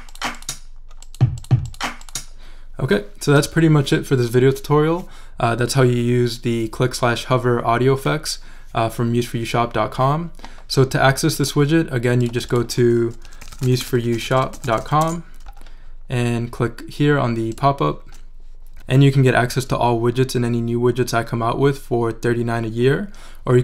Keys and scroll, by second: 13.0-15.3 typing.